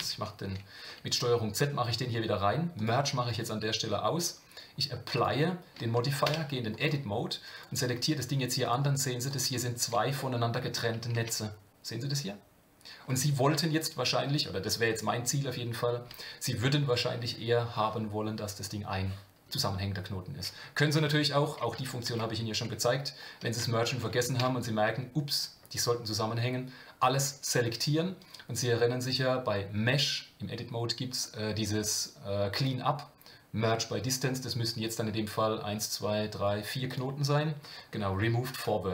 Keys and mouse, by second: 2.7 click, 4.1-5.2 drag, 6.2 Tab, 7.5 click, 7.9 g, 9.3 click, 9.8 g, 10.2 middle click, 11.1 Tab, 21.1-22.6 ctrl+z, 23.8 shift+middle click, 24.4 a, 24.4 q, 28.2-37.0 drag.